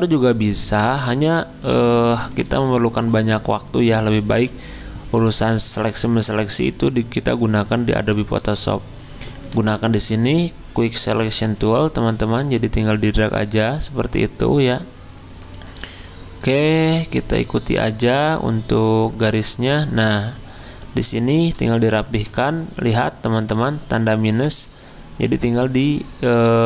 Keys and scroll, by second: 5.5 w.